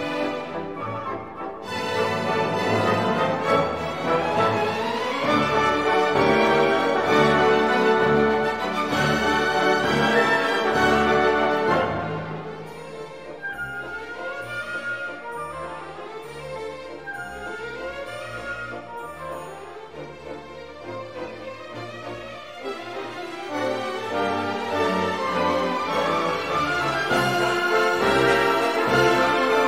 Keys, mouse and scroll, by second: 1.1 click, 1.9 click, 3.6 click, 4.6 ctrl+click, 5.8 click, 6.6-12.3 drag, 12.2 0, 14.3 scroll down 2, 15.2 scroll up 2, 17.0 click, 17.6 space, 18.3 click, 19.9 click, 21.6 scroll down 1, 25.7 scroll down 1, 27.6 click, 28.7 2, 29.2 0.